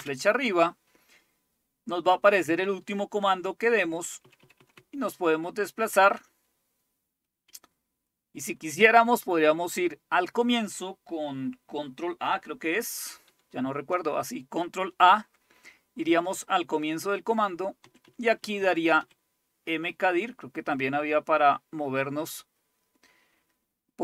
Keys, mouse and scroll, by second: 4.0 Left, 4.2 Left, 4.3 Left, 4.5 Left, 4.7-5.6 Left, 6.2-7.4 Right, 7.0 Right, 13.3 ctrl+a, 17.8 Right, 18.1 Right, 18.2 Right, 18.4 Right, 18.6 Right, 19.0 Right, 20.3 Left, 21.0 Left, 21.0-21.5 Left.